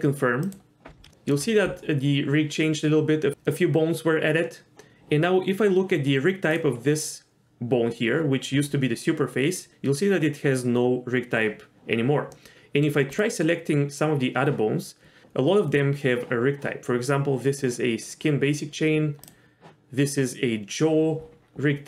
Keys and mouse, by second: 1.1 shift+middle drag, 6.5 click, 12.3-12.8 middle drag, 13.1 drag.